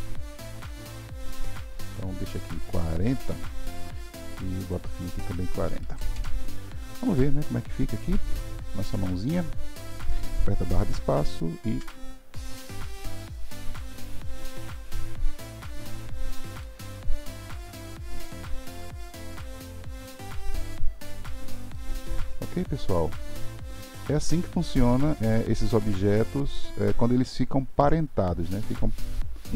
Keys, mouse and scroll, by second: 4.6-7.1 drag, 7.1-11.6 middle drag, 11.6 space, 15.8-20.2 middle drag, 21.7-29.5 middle drag.